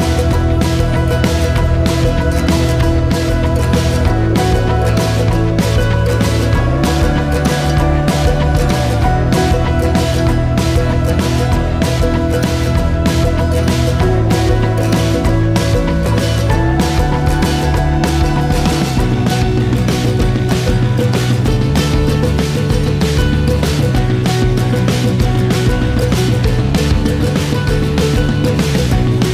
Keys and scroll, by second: 11.0 ctrl+s, 14.2-15.4 typing.